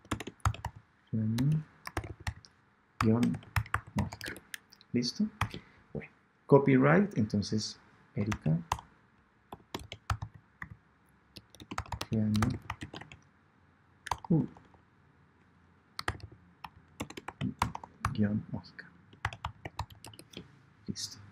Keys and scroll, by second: 8.6 shift+BackSpace, 9.4 BackSpace, 14.0 shift+BackSpace, 17.5 shift+BackSpace.